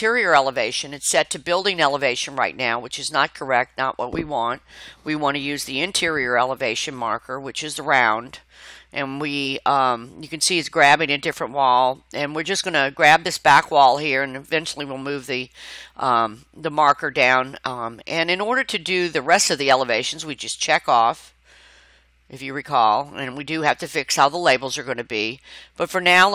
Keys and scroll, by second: 13.7 Escape, 16.7 Escape, 24.9 Escape.